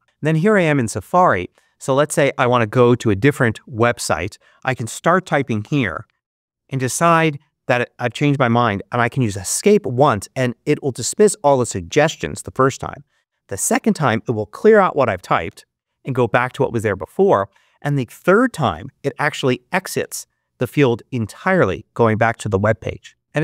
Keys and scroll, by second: 4.7-6.3 typing, 11.7 Escape, 15.3 super+r, 19.9 Escape.